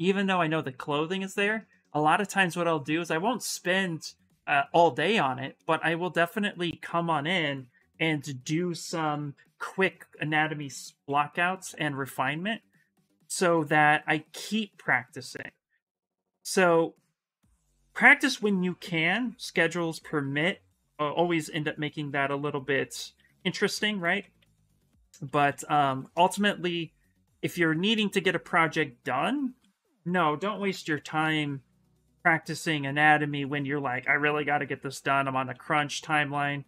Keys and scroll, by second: 6.5 s, 7.7-12.0 typing, 22.0 ctrl+z, 22.2 ctrl+z, 22.3 ctrl+z, 22.6 ctrl+z, 22.8 ctrl+z, 23.3 ctrl+z, 23.5 ctrl+z, 23.8 ctrl+z, 23.9 ctrl+z, 24.1 ctrl+z, 24.3 ctrl+z, 24.4 ctrl+z, 24.6 ctrl+z, 24.7 ctrl+z, 24.8 ctrl+z, 25.0 ctrl+z, 25.1 ctrl+z, 25.3 ctrl+z, 25.4 ctrl+z, 25.6 ctrl+z, 29.5 s, 30.4 x, 35.2 s.